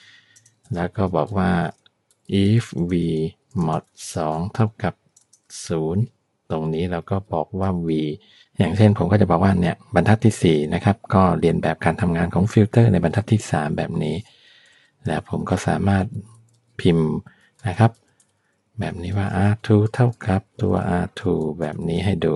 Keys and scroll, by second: 0.0-0.9 typing, 2.2-5.7 typing, 7.7 v, 14.8 Return, 15.8-21.8 typing.